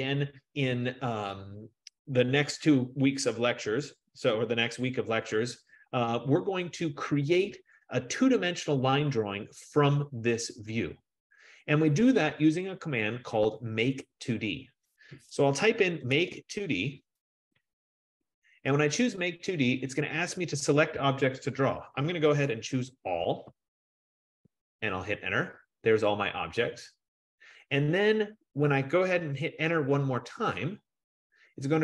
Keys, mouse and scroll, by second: 15.9-17.0 typing, 17.7 Return, 23.1-24.1 typing, 24.6 Return, 30.5 Return.